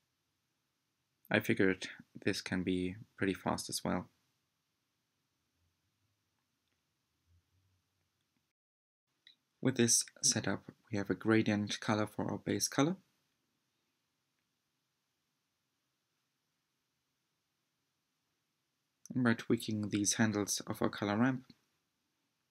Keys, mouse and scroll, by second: 0.1 scroll down 2, 14.3 click, 15.8-16.5 scroll up 2, 16.5 shift+middle click, 17.1-17.5 scroll up 5, 17.7 shift+middle click, 20.7-22.5 drag.